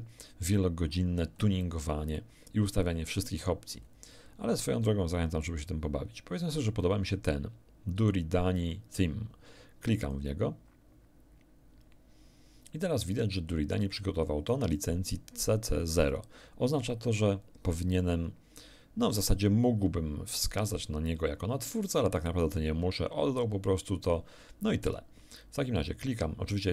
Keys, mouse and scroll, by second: 0.3-0.7 scroll down 2, 0.9 scroll down 2, 3.0 scroll down 2, 10.0 click.